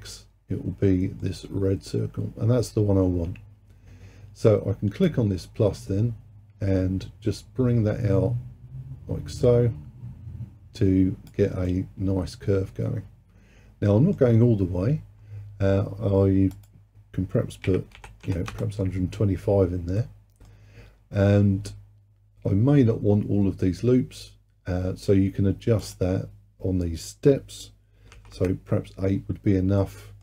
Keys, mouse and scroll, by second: 0.2-3.2 middle drag, 5.1-8.1 drag, 11.7-14.7 middle drag, 16.6-19.6 drag, 20.0-23.1 middle drag, 25.9-29.1 drag, 29.8-30.2 middle drag.